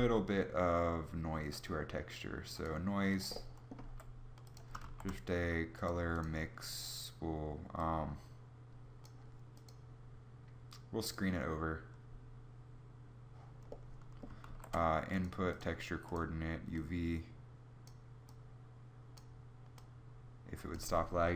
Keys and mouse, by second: 3.5 g, 4.5 shift+a, 13.9 shift+a.